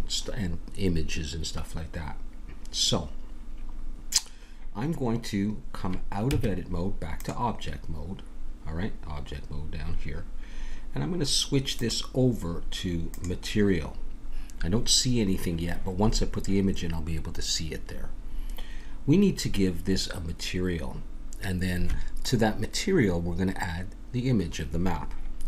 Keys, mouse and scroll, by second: 6.3 Tab, 11.7-13.7 drag.